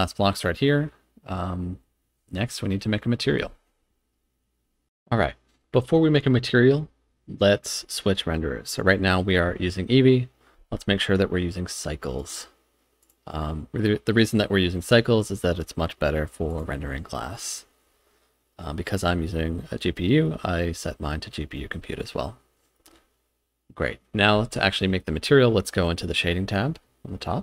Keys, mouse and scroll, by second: 8.8 click, 12.2-13.1 drag, 16.5-17.4 drag.